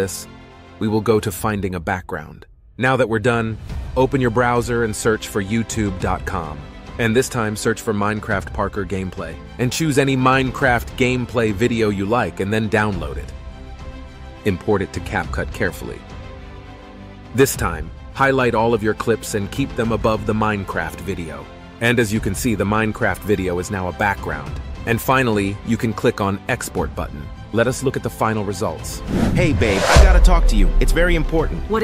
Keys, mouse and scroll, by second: 0.0-2.2 typing, 0.0 ctrl+b, 0.0 Delete, 0.5 ctrl+b, 0.7 ctrl+b, 1.0 alt+Tab, 1.2 ctrl+b, 1.3 Delete, 1.3 Delete, 1.8 ctrl+b, 2.3 ctrl+b, 2.6 Delete, 3.7-8.2 typing, 25.2 space, 26.5-27.6 typing.